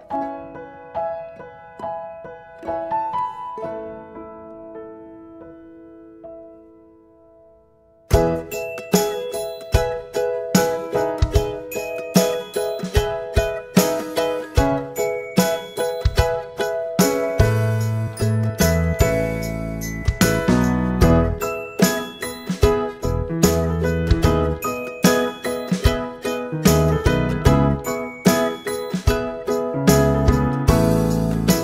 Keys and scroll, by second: 2.2 1, 2.5 Return, 5.5 typing, 5.8 Return, 28.1 ctrl+z.